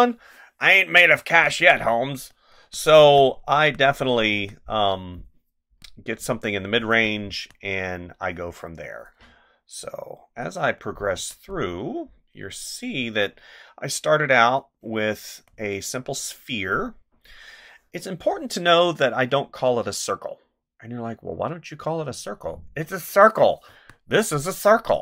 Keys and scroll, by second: 1.1 space, 2.9 space, 4.3 space, 6.8 space, 11.2 space, 13.0 space, 23.6 space.